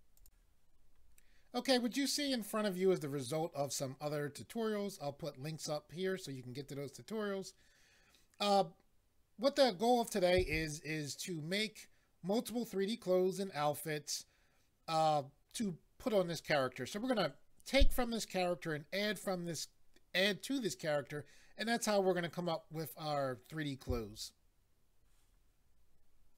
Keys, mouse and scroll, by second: 0.2 click, 26.3 click.